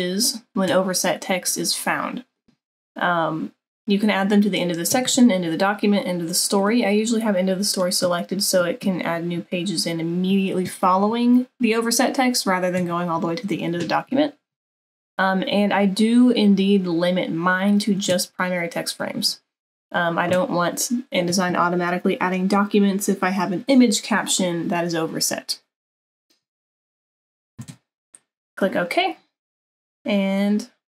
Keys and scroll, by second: 27.8 super+-.